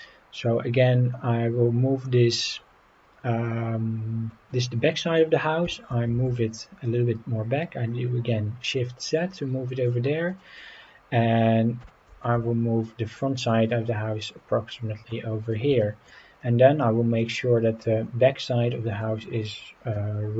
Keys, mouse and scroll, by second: 2.0 middle drag, 4.7 scroll up 2, 4.9 scroll down 1, 5.6 scroll down 1, 5.6 g, 6.1 shift+z, 9.8 click, 11.8 g, 12.2 shift+z, 15.4 click, 15.8 shift+middle drag, 16.2-16.6 scroll up 2, 17.2 click, 18.4-19.0 middle drag, 19.9-20.3 middle drag.